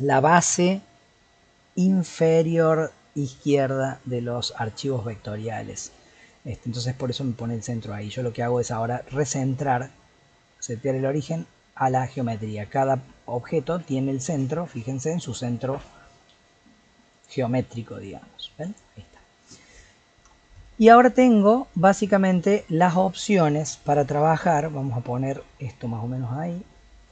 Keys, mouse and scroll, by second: 5.0-6.3 middle drag, 6.3-8.5 scroll up 3, 8.5-11.7 right drag, 12.7 click, 13.8 click, 14.7-16.2 middle drag, 16.2 g, 17.7 click, 18.1 g, 19.0-21.2 middle drag, 21.2 scroll up 2, 21.7-22.3 scroll down 5, 22.3 click, 22.8-24.4 scroll down 4, 24.4 KP_7, 25.3 g.